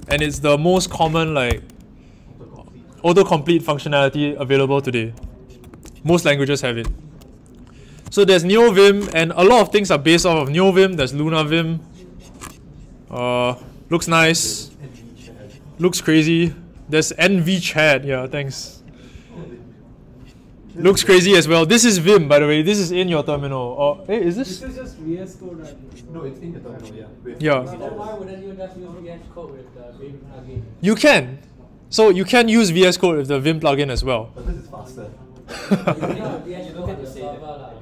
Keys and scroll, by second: 0.0-1.7 typing, 5.6 super+w.